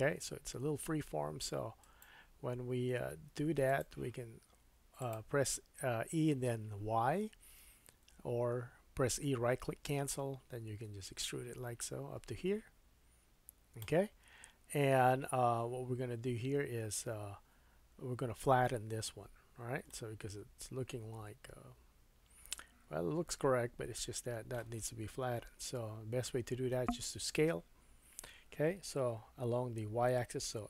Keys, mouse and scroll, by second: 3.1 g, 5.0-20.7 drag, 19.9 middle click, 20.7-22.9 middle drag, 24.3-30.6 drag, 25.4 KP_3.